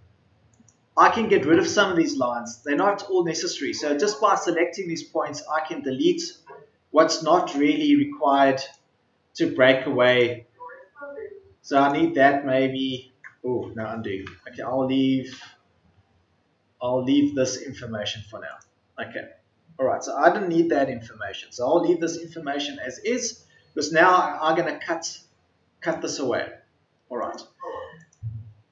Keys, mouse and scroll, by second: 3.9 Delete, 8.9 Delete, 9.1 typing, 10.3 Delete.